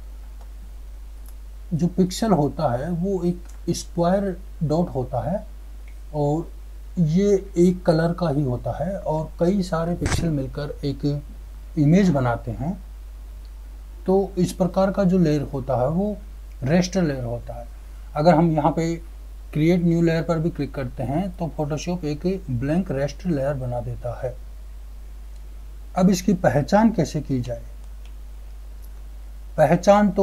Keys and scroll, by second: 29.6 ctrl+0.